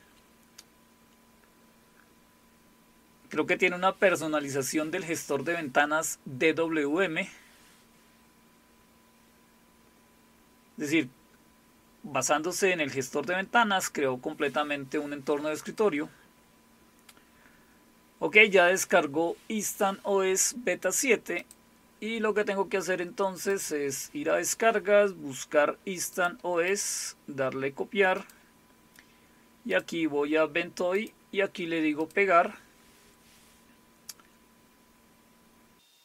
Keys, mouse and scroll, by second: 2.3 scroll up 1, 7.4 scroll up 2, 8.0 scroll down 2, 8.5-9.0 scroll down 2, 9.4 scroll down 2, 15.7 click, 16.8 scroll down 1, 17.4 scroll up 1, 21.4 click, 23.5 click, 26.1 click, 26.7 right click, 26.8 click, 28.2 click, 29.7 click, 30.9 right click, 32.0 click.